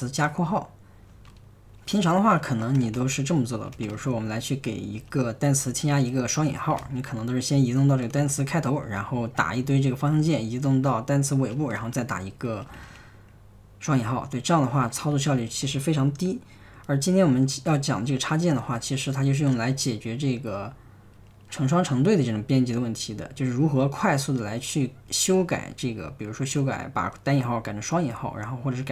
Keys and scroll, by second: 0.0 super+Tab, 1.1 super+Tab, 2.7-5.3 typing, 6.4-8.2 typing, 8.8 Tab, 9.4 Right, 9.5 Right, 9.6 typing, 10.1 Tab, 11.8-13.3 typing, 14.8-15.6 typing, 19.3 super+Tab.